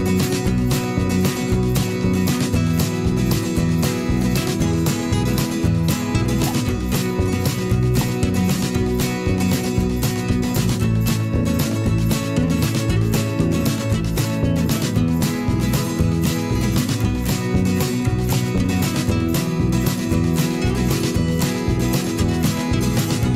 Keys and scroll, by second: 2.1 m, 5.1 ctrl+shift+[, 6.1 v, 11.6 ctrl+a, 15.1 t, 16.7 Caps_Lock, 16.9-21.0 typing, 22.8 ctrl+shift+,.